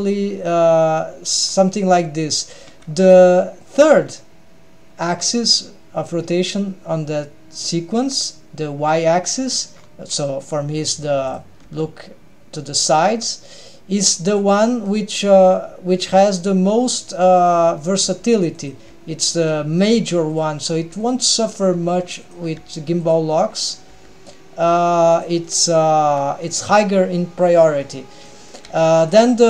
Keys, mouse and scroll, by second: 1.0-1.3 scroll down 1, 1.6-2.6 scroll down 2, 2.8 alt+a, 8.1 scroll down 1, 9.1-9.9 scroll up 3, 9.9-11.1 scroll down 2, 11.1-11.4 scroll down 1, 11.4 click, 11.6 g, 14.6-15.6 middle drag, 16.1 g, 17.1-18.0 middle drag, 18.1 g, 18.9 g, 19.5-20.0 middle drag, 20.1 g, 20.7 g, 21.4 middle click, 21.8 g, 22.6 g, 23.3-24.0 middle drag, 24.1 g, 25.5 middle click, 26.1 g, 28.4-28.7 middle drag, 28.8 g.